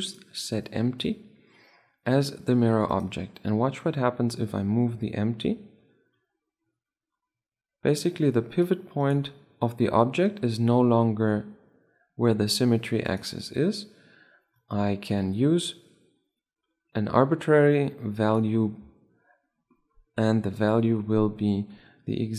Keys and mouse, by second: 3.5-5.4 right drag, 4.5-6.2 drag, 9.4-10.5 right drag, 13.7-15.4 right drag, 15.2-17.0 drag, 20.3-22.3 middle drag.